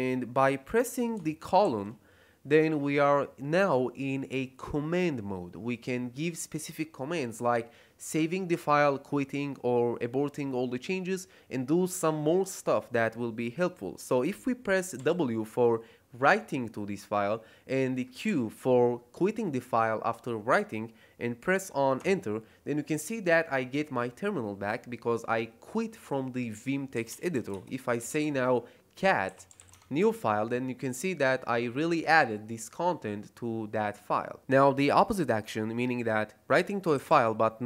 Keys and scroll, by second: 1.6 shift+;, 14.9 w, 18.2 q, 21.9 Return, 26.9-30.0 typing, 36.5-37.6 typing.